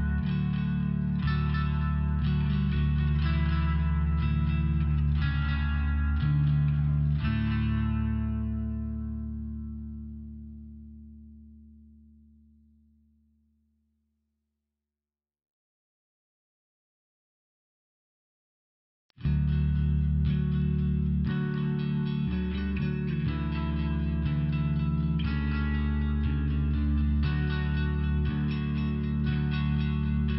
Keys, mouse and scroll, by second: 1.9 click, 1.9 click, 3.2 click, 5.4 click, 7.3 click, 7.4 click, 8.9 click, 9.0 click, 10.1 click, 10.1 click, 10.2 click, 11.1 click, 12.8 click, 12.9 click, 14.8 click, 22.0 click, 22.2 click, 23.7 click, 23.8 click, 24.3-25.9 typing, 24.5 click, 26.1 Return, 26.7 Return, 27.6 click.